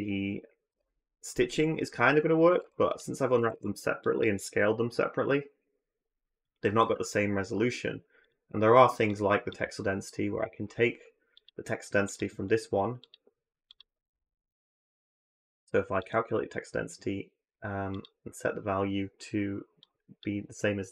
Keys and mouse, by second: 0.7 alt+v, 3.2 a, 3.3 a, 4.0-6.5 drag, 6.6 n, 8.0 click, 9.0 drag, 11.2-12.0 drag, 12.8-13.6 drag, 15.9-20.0 drag.